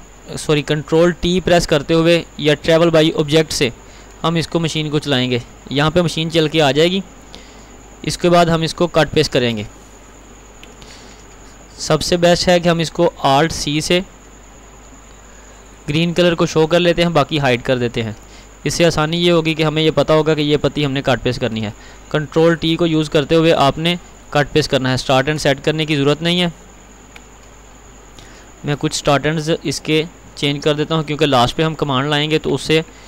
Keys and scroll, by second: 9.4 ctrl+x, 13.4 alt+c, 22.7 ctrl+t, 25.7 ctrl+r.